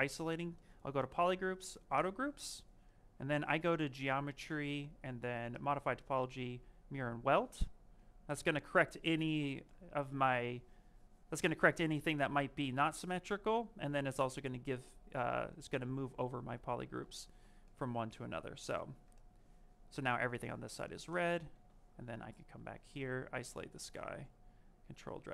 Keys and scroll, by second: 16.0 ctrl+z, 18.6 v.